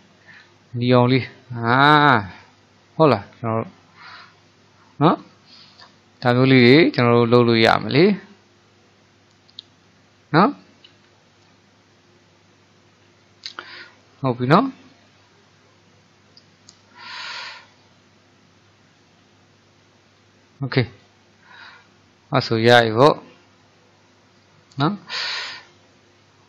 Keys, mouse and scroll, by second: 2.4-24.8 middle drag, 25.9-26.4 middle drag.